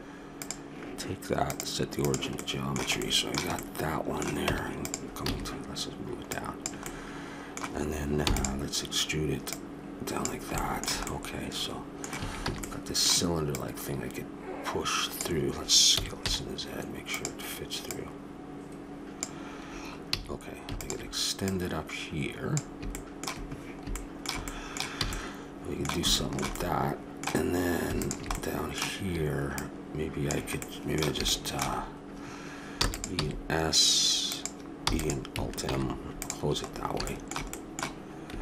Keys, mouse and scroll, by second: 0.4-2.0 drag, 2.4-4.4 middle drag, 4.4 Tab, 5.2 a, 6.3-8.1 drag, 8.2 e, 9.4-10.5 drag, 10.5 middle click, 11.1 click, 11.3 middle click, 12.1 a, 12.5 a, 13.0 middle click, 13.5-15.1 drag, 15.9 s, 17.8-19.7 drag, 20.1 a, 20.8-23.2 drag, 22.9-25.2 middle drag, 25.0 a, 28.0 click, 28.6-30.0 middle drag, 30.0 click, 30.6 middle click, 32.8 e, 33.1 s, 34.8 e, 35.6 alt+m, 36.6-38.1 middle drag.